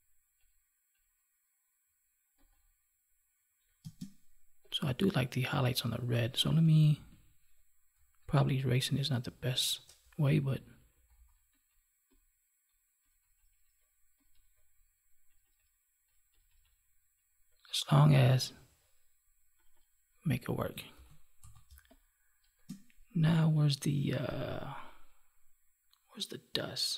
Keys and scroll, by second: 3.8 space, 20.9 ctrl+s, 21.6 space.